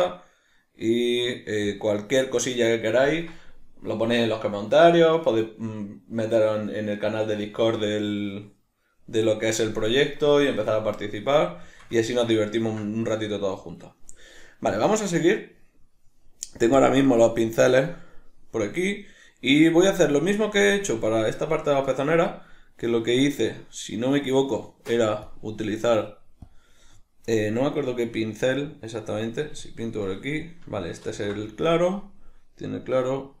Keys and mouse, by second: 1.7-6.3 drag, 6.3-16.8 middle drag, 16.8-21.5 drag, 24.7-25.3 middle drag, 25.3-33.4 drag, 31.1 ctrl+z.